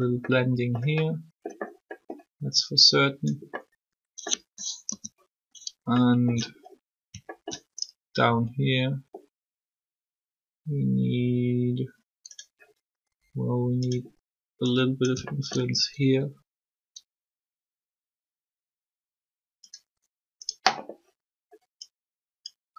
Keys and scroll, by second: 4.8 3, 8.3 alt+shift+r, 16.0 alt+shift+r.